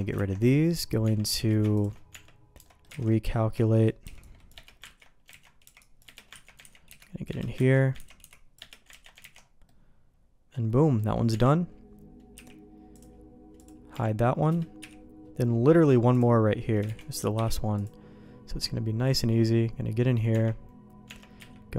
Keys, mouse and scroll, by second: 0.1 ctrl+x, 1.0 Tab, 1.3 q, 2.1 Tab, 2.9 alt+a, 3.1 middle click, 3.6 shift+click, 4.0 c, 5.0 ctrl+q, 5.3 ctrl+x, 5.6 c, 6.4 ctrl+q, 6.6 ctrl+x, 6.9 c, 7.7 ctrl+q, 8.0 ctrl+x, 8.2 c, 9.0 ctrl+q, 9.2 ctrl+x, 9.6 middle click, 10.9 middle click, 11.3 Tab, 12.3 h, 12.9-13.9 drag, 13.9 g, 14.8 h, 16.1 click, 16.9 shift+d, 17.3 m, 19.1 click, 20.3 Tab, 21.0 Tab, 21.4 q.